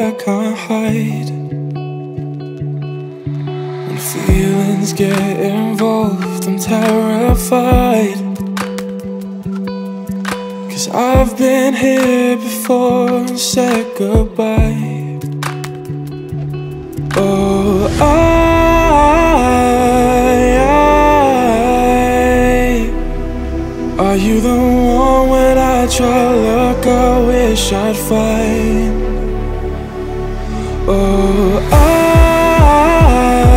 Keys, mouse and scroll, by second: 2.6-3.5 drag, 3.9 click, 4.7-5.4 alt+drag, 5.8 alt+click, 6.3 Tab, 6.9-9.9 drag, 10.2 shift+g, 12.4-13.5 alt+drag, 14.4-16.1 alt+drag, 16.1 ctrl+KP_Add, 17.3 ctrl+KP_Add, 18.7 scroll up 3, 19.0-20.1 alt+drag, 20.1 ctrl+KP_Add, 21.0-21.3 scroll down 2, 21.3-23.0 alt+drag, 23.0 ctrl+KP_Add, 23.9 ctrl+KP_Subtract, 24.7 scroll down 2, 25.0-26.9 alt+drag, 27.9-32.2 drag, 32.9-33.5 drag.